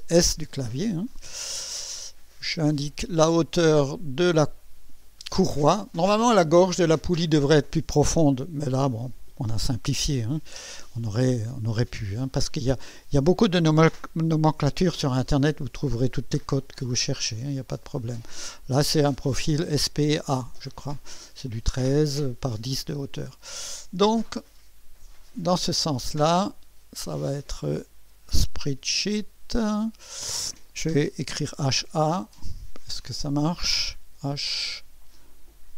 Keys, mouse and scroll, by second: 3.1 click, 5.0 click, 25.2 click, 27.5 click, 28.3-28.8 typing, 29.5 click, 31.2-31.7 typing, 33.0 click, 34.1 typing.